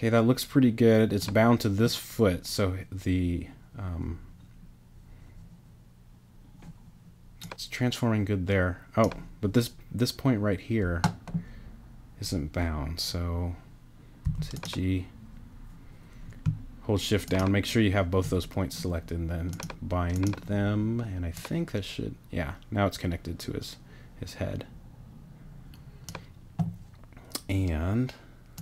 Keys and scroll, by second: 14.2 g.